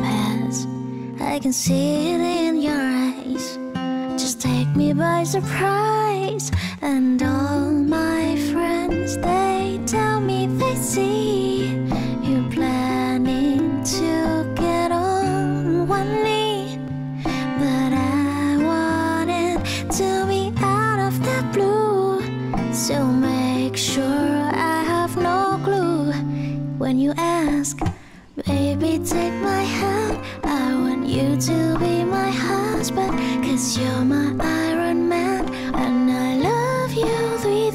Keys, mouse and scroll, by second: 2.8 p, 35.3 F9.